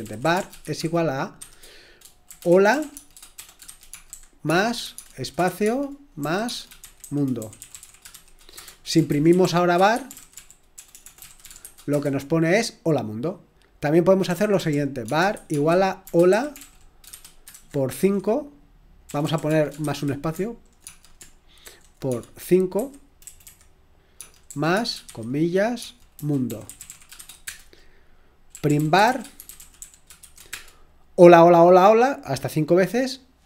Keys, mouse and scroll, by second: 0.0-12.1 typing, 14.0-22.6 typing, 24.1-24.7 typing, 25.8-31.0 typing.